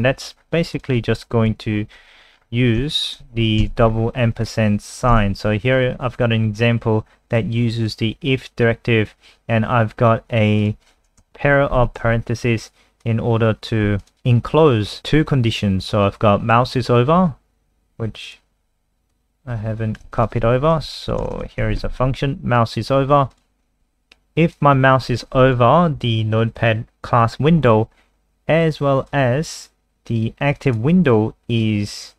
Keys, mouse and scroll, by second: 0.3 scroll up 2, 0.7 click, 1.5 Right, 2.1-2.9 scroll down 7, 2.9 shift+click, 3.6 ctrl+v, 3.8-5.1 scroll up 8, 5.1 ctrl+s, 7.3 click, 11.3 shift+Left, 13.0 ctrl+click, 14.0 click, 17.2-18.2 scroll down 1, 18.2 click, 18.5 scroll down 2, 19.1 click, 20.0 ctrl+c, 20.2 click, 21.0 ctrl+End, 21.2 Return, 21.3 Return, 21.5 ctrl+v, 21.6 ctrl+s, 22.6 click.